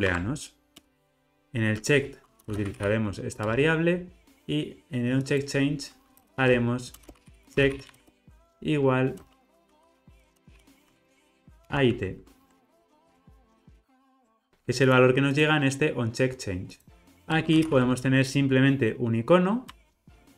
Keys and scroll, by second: 0.0 alt+Return, 3.5 Return, 10.9 Escape, 11.5 super+z, 11.8 super+l, 12.8 super+z, 13.4 super+z, 17.1 Tab, 19.8 Return.